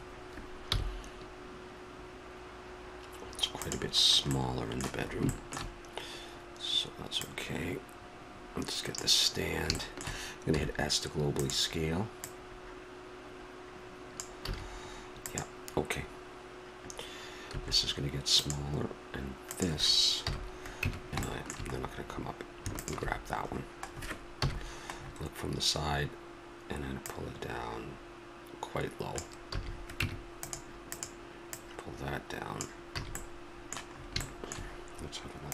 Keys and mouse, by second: 0.7 g, 4.0-7.1 middle drag, 7.1-9.1 drag, 9.8-12.2 middle drag, 10.5 s, 12.2-14.0 drag, 14.5 a, 15.3-17.2 drag, 19.5-21.2 drag, 20.2 KP_1, 20.8 Tab, 22.7-24.7 drag, 24.4 KP_1, 27.0-29.1 drag, 29.5 a, 30.0 Tab, 30.9-32.6 right drag, 32.6 click, 33.0 a.